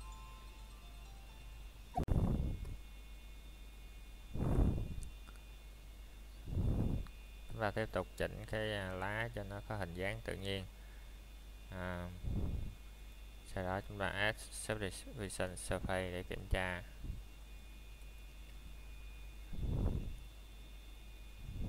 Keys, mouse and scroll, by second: 1.7 scroll down 1, 2.5 click, 3.4 scroll down 1, 3.7 shift+middle click, 3.9 scroll up 1, 4.7 click, 5.9 scroll down 1, 6.2 shift+middle click, 6.6 scroll up 1, 7.4 shift+middle click, 7.6 scroll up 1, 8.5 click, 10.9 scroll down 1, 11.4 shift+middle click, 11.7 scroll up 1, 12.7 click, 14.0 scroll down 1, 14.2 shift+middle click, 14.5 scroll up 1, 15.6 click, 17.2 scroll down 1, 17.6 shift+middle click, 17.9 scroll up 1, 18.6 click, 20.2 scroll down 1.